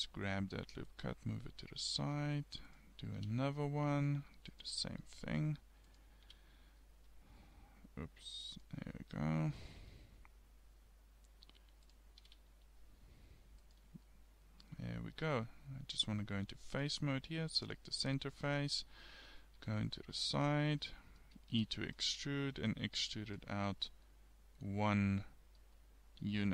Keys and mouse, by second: 2.1 ctrl+r, 5.3 ctrl+r, 9.8 ctrl+r, 14.1-15.2 middle drag, 18.1-19.3 middle drag, 19.6 KP_3, 21.6 e, 26.0 middle click.